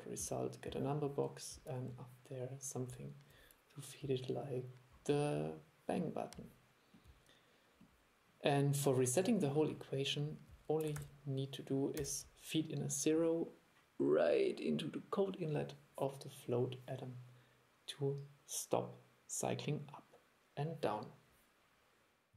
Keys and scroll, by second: 11.0 super+2.